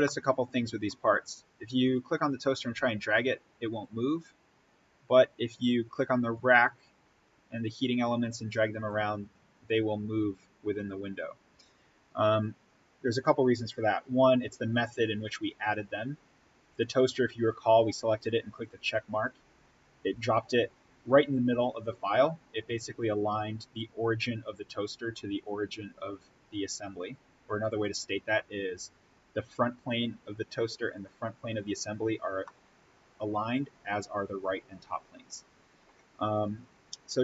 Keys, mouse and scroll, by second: 0.0-1.8 middle drag, 1.8-3.9 drag, 3.9-5.3 scroll up 1, 5.3-11.1 drag, 16.6 click, 21.7 click, 23.9-25.8 scroll up 1, 27.7 click, 29.2-30.8 scroll up 1, 30.9 ctrl+click, 32.4-36.3 middle drag, 36.3 click.